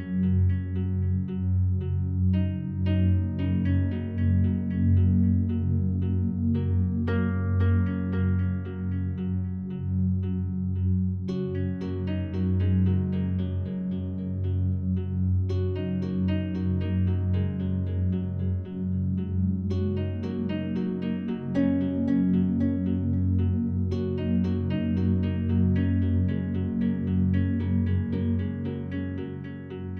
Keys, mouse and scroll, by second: 2.2-9.7 alt+drag, 9.7 Tab, 10.7 right click, 12.9-13.3 scroll down 1, 13.6-15.0 alt+drag, 15.0-15.6 scroll up 2, 15.6-16.2 scroll up 1, 17.1 right click, 20.1 r, 22.9 Return, 23.8 right click, 26.3 shift+right click, 27.9 ctrl+j.